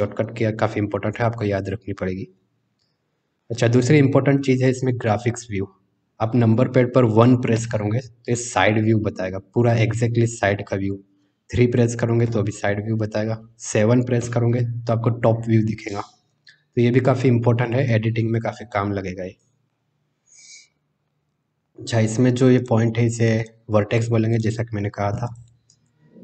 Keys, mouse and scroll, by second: 3.5 middle click, 7.5 KP_1, 12.2 KP_3, 14.1 KP_7, 18.7 shift+middle click, 19.6 middle click, 22.5 click, 23.3 click, 25.2 click.